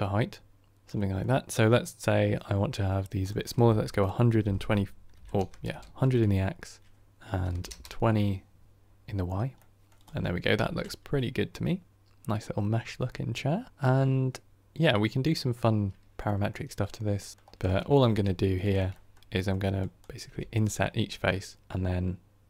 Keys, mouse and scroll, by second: 0.7-5.9 drag, 5.9 KP_0, 9.5-9.9 middle drag, 9.9 click, 10.7-13.7 middle drag, 13.7-14.5 scroll up 7, 14.5-15.7 middle drag, 15.7-16.1 scroll down 3, 16.1-22.4 middle drag.